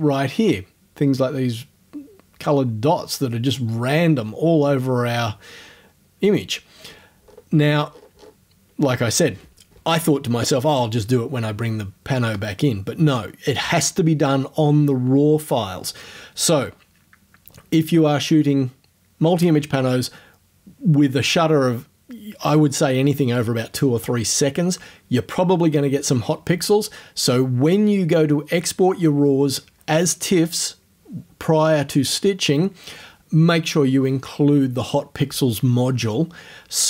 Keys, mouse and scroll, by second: 5.6-6.0 scroll down 1, 6.2-7.9 scroll down 5.